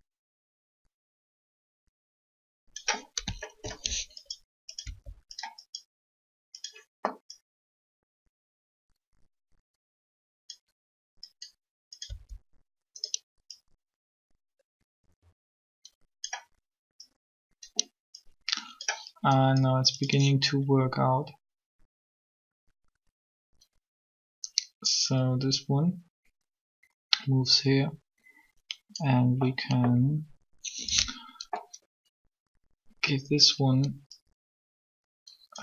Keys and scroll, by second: 4.7 shift+r, 12.1 r.